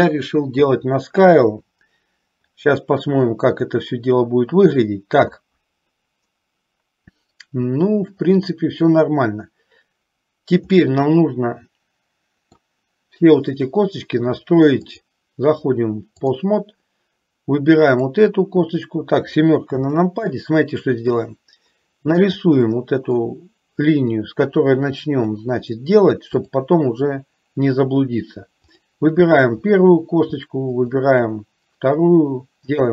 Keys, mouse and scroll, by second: 1.6 KP_3, 10.9-12.8 middle drag, 14.9-16.5 drag, 17.9 click, 19.8 KP_7, 22.5 click, 24.4-25.4 drag, 26.5 click, 28.8 click, 30.9 shift+click.